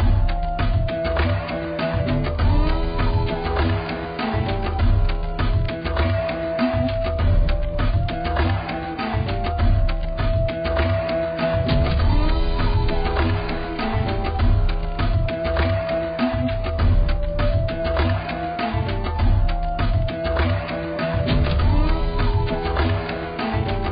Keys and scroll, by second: 4.6 [, 5.0 [.